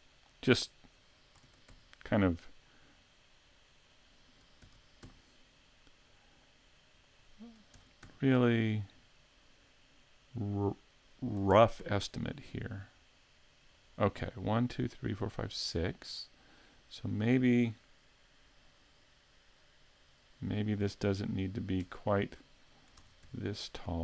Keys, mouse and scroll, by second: 0.8 click, 1.5 shift+d, 4.1 click, 4.6 shift+d, 7.2 click, 7.8 shift+d, 10.8 click, 11.5 shift+d, 13.9 click, 15.5 middle click, 16.2 scroll down 3, 16.9 right click, 21.4 right click, 21.8 Tab, 23.0 ctrl+Tab, 23.9 right click.